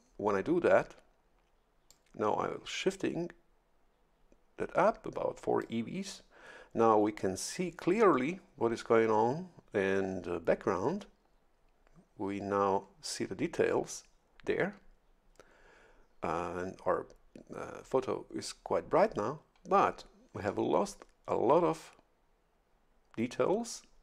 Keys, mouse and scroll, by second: 1.9-5.8 drag.